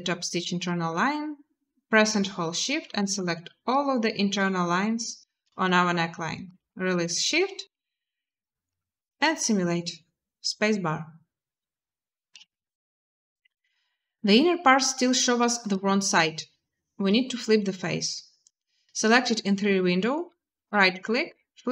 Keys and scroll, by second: 6.7 a, 8.9 space, 12.1 space.